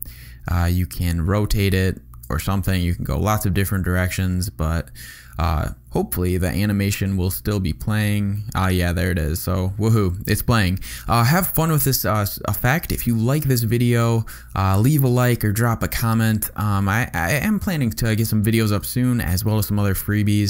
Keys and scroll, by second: 3.5 space, 18.8 space.